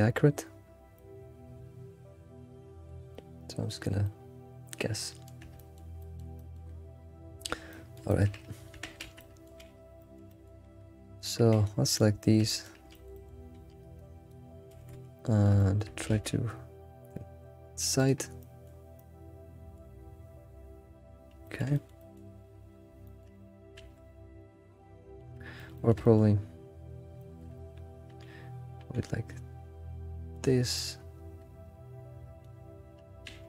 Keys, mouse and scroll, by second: 1.6 c, 3.1-7.5 shift+middle drag, 7.6 scroll down 2, 7.7-8.3 middle drag, 8.6 scroll up 1, 9.4 Tab, 9.4 middle click, 10.0-11.2 shift+middle drag, 11.2 alt+click, 11.5-12.9 middle drag, 13.5 alt+x, 14.3 ctrl+click, 14.7 alt+x, 15.1 middle click, 16.1 alt+s, 18.4 shift+middle click, 21.2 scroll down 1, 21.6 middle click, 22.0 alt+middle click, 22.7 scroll up 2, 23.0 shift+middle click, 24.2 scroll down 3, 24.4 ctrl+z, 24.4-25.4 middle drag, 25.7 alt+middle click, 26.0 shift+middle click, 26.3-27.2 scroll up 4, 27.2-28.8 shift+middle drag, 28.8 ctrl+g, 30.3 g, 30.7-32.3 middle drag, 32.5 middle drag, 33.0-33.3 scroll down 2.